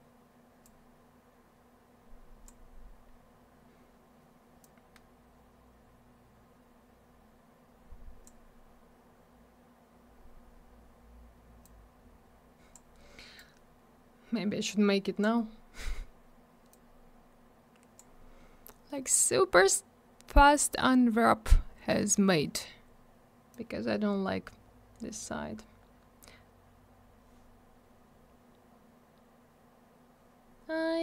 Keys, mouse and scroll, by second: 0.6 click, 4.6 click, 11.6 click, 13.3 click, 16.7 click, 20.6-21.5 scroll up 1, 21.6-22.2 scroll down 1, 23.5 click.